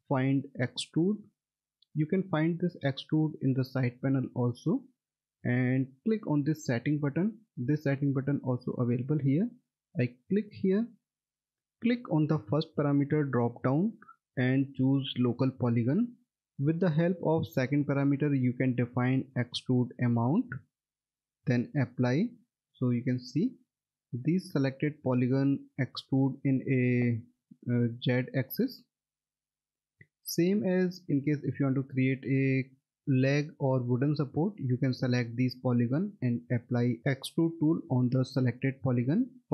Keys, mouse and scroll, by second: 10.3 click, 13.6 click, 18.6 click, 22.6 middle click, 22.8-23.8 scroll down 1, 23.9 alt+middle click, 26.5 middle click, 26.7-27.2 scroll down 1, 27.3 scroll, 27.5 alt+middle click, 30.8 middle click, 31.2-31.7 scroll up 1, 31.8 alt+middle click, 32.5 middle click.